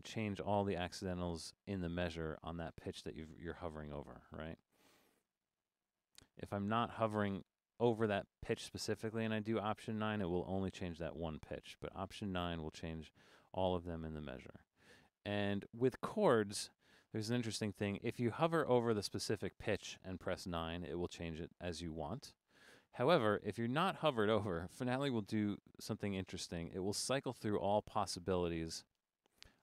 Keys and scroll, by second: 0.2 alt+9, 2.5 Up, 2.8 Down, 4.1 alt+9, 4.8 Up, 5.0 Up, 5.5 alt+9, 9.9 alt+9, 10.9 Down, 11.1 Down, 12.4 alt+9, 14.4 Return, 15.9 Down, 17.9 Up, 18.0 Up, 18.5 Up, 20.6 9, 22.6 9, 23.5 Down, 23.7 Down, 23.8 Down, 26.6 Down, 28.3-29.6 typing.